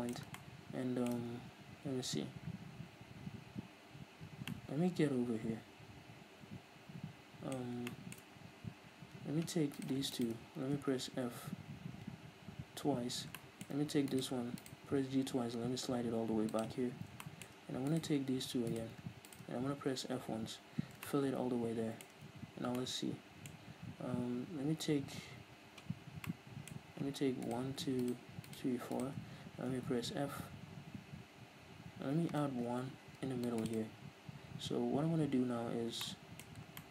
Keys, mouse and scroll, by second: 0.4-9.8 ctrl+middle drag, 2.0-4.2 scroll down 2, 4.2 scroll down 1, 7.6-9.0 scroll up 4, 9.0-9.8 scroll down 2, 9.8 right click, 10.2 shift+right click, 10.9 f, 12.8-13.3 scroll up 1, 13.4 shift+middle click, 14.1 right click, 14.9 g, 16.6 click, 16.9 scroll down 1, 17.2 shift+middle click, 17.9-20.2 right drag, 20.2 f, 21.1-27.5 shift+middle drag, 27.5-29.9 right drag, 29.9 f, 32.7 ctrl+r, 33.7 click, 33.8 right click, 36.1-36.9 shift+middle drag.